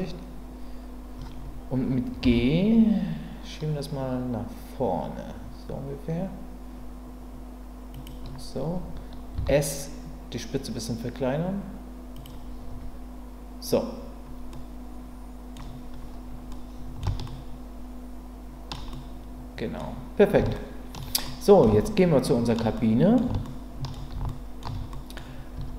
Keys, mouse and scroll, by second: 2.2 g, 7.9 click, 9.3 s, 12.1 click, 12.7 Tab, 14.5-15.5 middle drag, 16.5-17.0 middle drag, 17.2-18.7 shift+middle drag, 18.9-19.8 middle drag, 20.5-21.0 shift+middle drag, 21.2-21.6 middle drag, 21.8-22.5 shift+middle drag, 22.7-23.1 middle drag, 23.4-23.9 shift+middle drag, 24.3-24.6 ctrl+middle drag, 24.9 middle click, 25.5 Tab.